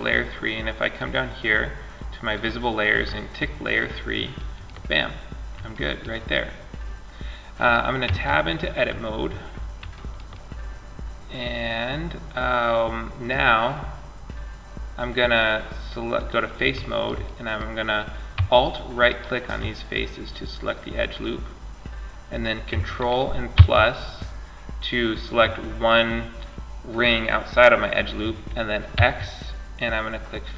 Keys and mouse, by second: 1.6-3.5 drag, 3.5-5.0 middle drag, 7.3 Tab, 8.2-10.3 middle drag, 11.1 click, 11.4 click, 11.6-14.3 middle drag, 14.6-17.5 drag, 17.5 middle click, 18.3 click, 19.0-20.8 middle drag, 22.8 ctrl+KP_Add, 28.2 x, 30.3-30.5 middle drag.